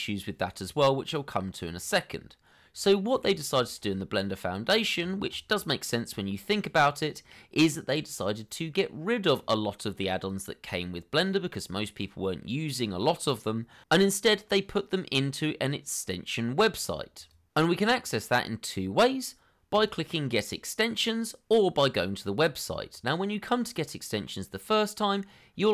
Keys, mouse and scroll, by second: 3.1 scroll up 1.